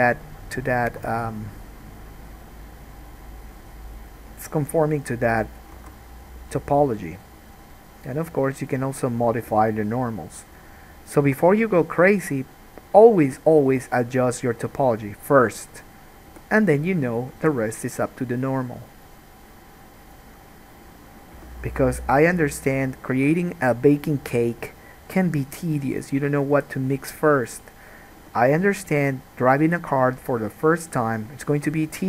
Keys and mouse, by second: 1.1 1, 1.5 middle click, 1.5 right click, 4.2 click, 6.0 alt+a, 7.3-8.8 drag, 7.3-8.8 middle drag, 7.3-12.4 right drag, 9.6 g, 11.4 g, 13.1 middle click, 13.9 g, 15.6 middle click, 16.5 g, 17.5 alt+a, 18.8-22.9 right drag, 21.5 g, 22.9 middle click, 23.0-27.0 right drag, 23.3 g, 27.5 click, 28.3 g, 31.0 click, 31.6 ctrl+click.